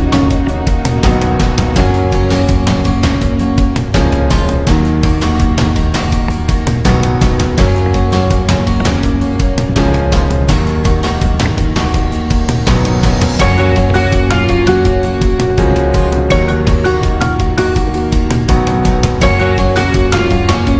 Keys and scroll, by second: 0.2 alt+shift+ê, 0.5 alt+shift+æ, 1.0 alt+shift+ý, 1.3 alt+shift+ã, 1.4 alt+shift+é, 1.6 alt+shift+ç, 1.8 alt+shift+´, 2.3 alt+shift+ý, 2.5 alt+shift+â, 2.8 alt+shift+è, 3.1 alt+shift+ù, 3.7 alt+shift+â, 3.8 alt+shift+õ, 4.0 alt+shift+è, 4.4 alt+shift+ý, 5.4 alt+shift+â, 5.9 alt+shift+ĵ, 6.3 alt+shift+?, 6.6 alt+shift+õ, 6.7 alt+shift+ġ, 6.9 alt+shift+´, 7.2 alt+shift+ú, 7.4 alt+shift+ã, 7.8 alt+shift+æ, 8.1 alt+shift+é, 8.4 alt+shift+á, 8.5 alt+shift+ĵ, 8.8 alt+shift+´, 9.1 alt+shift+ý, 9.3 alt+shift+â, 9.7 alt+shift+x, 9.9 alt+shift+à, 10.4 alt+shift+ø, 10.6 alt+shift+ý, 10.9 alt+shift+â, 11.3 alt+shift+û, 11.4 alt+shift+´, 12.0 alt+shift+ù, 13.3 alt+shift+×, 13.4 alt+shift+ğ, 13.9 ctrl+alt+ù, 14.1 alt+shift+ø, 15.4 alt+shift+´, 15.7 ctrl+alt+×, 16.0 alt+shift+ã, 16.5 alt+shift+ú, 16.7 alt+shift+ù, 16.9 alt+shift+æ, 17.0 alt+shift+ù, 17.5 alt+shift+â, 17.8 alt+shift+x, 17.9 alt+shift+ĝ, 19.1 super+i.